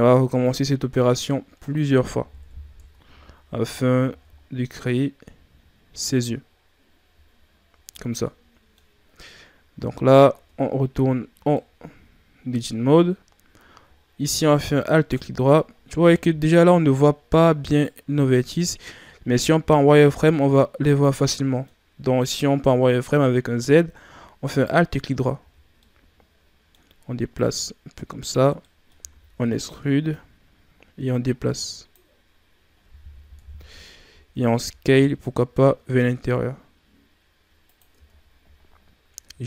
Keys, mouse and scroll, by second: 0.4-2.3 drag, 2.3 KP_1, 2.7 Tab, 3.3-4.0 scroll down 4, 4.0 a, 4.3-4.9 scroll down 2, 4.9-7.4 scroll up 4, 7.4 shift+scroll up 2, 8.0 ctrl+scroll down 1, 8.2-8.9 middle drag, 8.9 scroll up 1, 9.6 e, 10.3 Tab, 11.5-14.6 middle drag, 14.8 alt+right click, 16.0-17.6 middle drag, 17.6 right click, 18.2 middle click, 19.0-19.4 scroll up 2, 19.4 z, 20.2-23.3 middle drag, 24.5 alt+right click, 25.3 z, 25.5 scroll down 1, 25.7-27.3 middle drag, 27.3-28.5 drag, 28.5 middle click, 29.1 e, 30.0-33.1 drag, 33.3 KP_1, 34.5 s, 37.9 Tab, 38.2 scroll down 4, 39.2-39.4 scroll up 5.